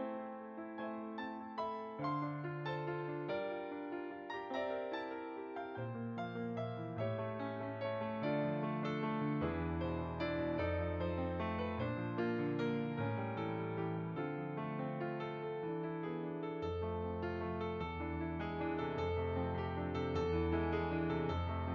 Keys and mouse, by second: 0.6 click, 6.0 f, 6.3 click, 8.9 f, 9.1 click, 11.1 middle click, 14.5 f, 14.7 click, 18.2 f, 18.3 click.